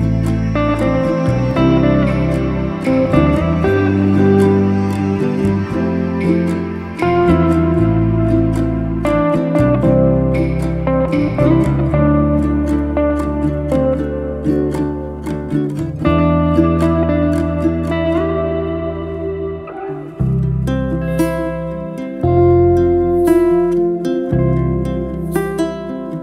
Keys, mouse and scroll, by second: 0.7-1.3 middle drag, 1.3 alt+z, 1.7 drag, 2.1-2.5 middle drag, 2.5 shift+click, 2.7-3.6 middle drag, 3.6 ctrl+b, 6.3-6.9 middle drag, 6.9 1, 7.2 click, 8.1 m, 8.6-9.2 middle drag, 9.2 click, 9.8 middle click, 10.8 1, 11.1 click, 11.8 alt+z, 12.1 click, 12.9 m, 13.4-14.8 middle drag, 14.8 alt+z, 14.9-16.2 middle drag, 16.2 3, 16.3 click, 16.5-17.2 scroll down 1, 17.2 g, 18.6-19.3 middle drag, 19.3-19.8 scroll up 1, 19.8 Tab, 20.1 middle click, 20.4 shift+click, 21.4 ctrl+KP_Subtract, 22.1-23.5 middle drag, 23.5 ctrl+z, 23.9 Tab, 24.1 click, 24.8 shift+d, 25.5 p, 26.1 Tab.